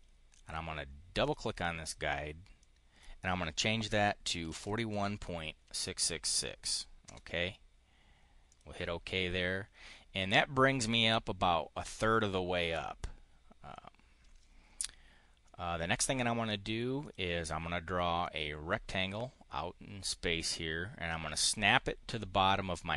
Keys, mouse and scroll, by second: 1.1 click, 2.5 click, 4.1-5.5 typing, 6.9 Return, 8.4 click, 15.3 click, 16.8 click, 17.9-21.3 drag.